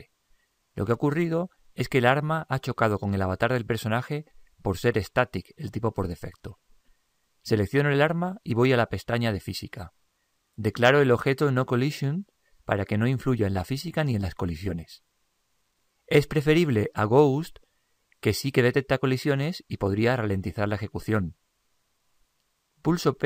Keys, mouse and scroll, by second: 8.1-9.8 right drag, 9.6-13.0 drag.